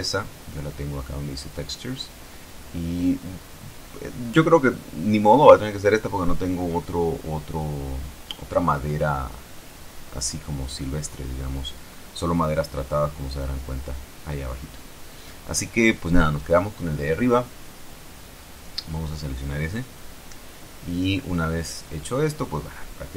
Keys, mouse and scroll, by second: 1.4 click, 2.6 click, 5.3 click, 6.5-18.6 drag, 20.9 click.